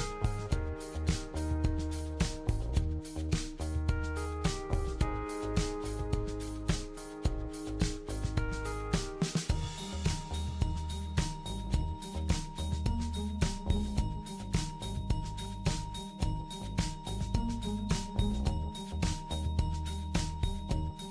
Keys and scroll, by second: 15.1 BackSpace.